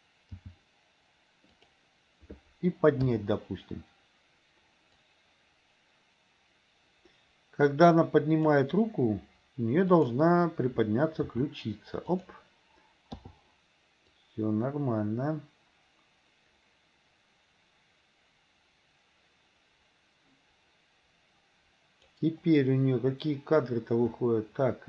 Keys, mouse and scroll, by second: 0.5 g, 3.2 i, 5.1-8.6 drag, 10.0 click, 11.4 r, 13.2 i, 14.2-22.2 drag.